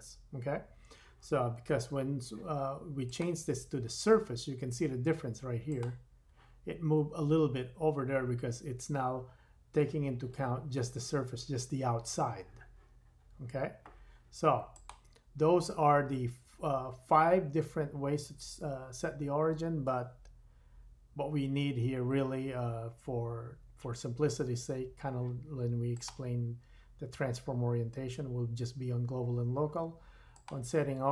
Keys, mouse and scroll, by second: 25.9 click, 30.3 click.